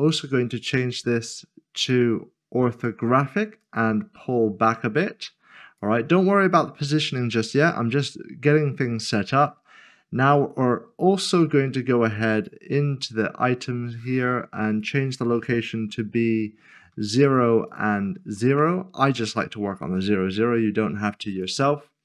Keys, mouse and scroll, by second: 1.8 click, 8.5 click, 12.3 click, 14.7 click, 17.2 0, 17.7 double click, 18.6 Return, 21.3 click.